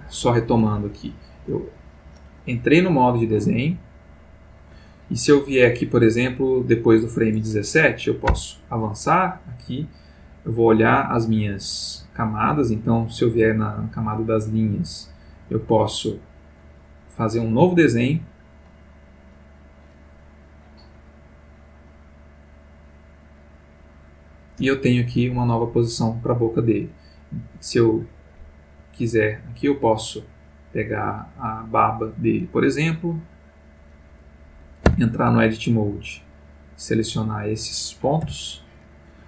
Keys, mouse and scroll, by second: 0.4 ctrl+middle click, 3.1 click, 4.1 click, 5.7 click, 8.3 Right, 10.3 click, 13.9 click, 15.0 click, 19.5 click, 21.9-23.5 drag, 29.5 click, 30.7 click, 33.1 click, 34.9 Tab, 36.4-37.1 drag, 38.2 l.